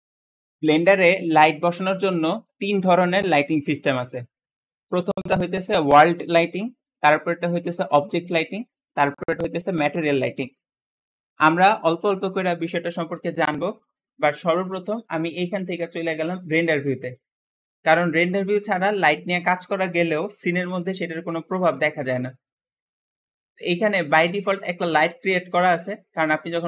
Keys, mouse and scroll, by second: 0.0 shift+Return, 0.0-2.2 shift+middle drag, 16.2 click, 22.3-22.7 scroll down 1, 22.7-24.5 middle drag, 24.5 click, 24.8 g, 26.3-26.6 middle drag.